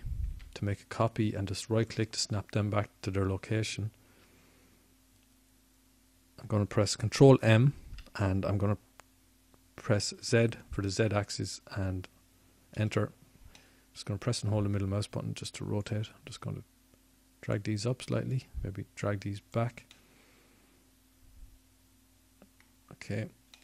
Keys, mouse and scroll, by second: 5.5 shift+d, 13.0 ctrl+m, 18.9 click.